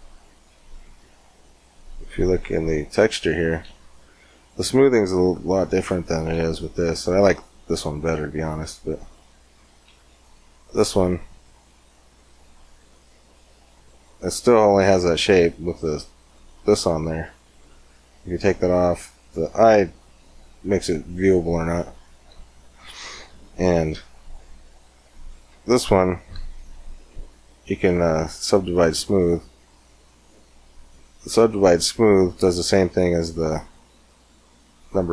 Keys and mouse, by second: 1.1 middle click, 1.2 click, 9.9-11.8 drag, 10.8 w, 12.6 Tab, 17.4-19.0 drag, 23.1 Tab, 25.2 Tab, 26.1 w, 29.1 w, 30.4 w.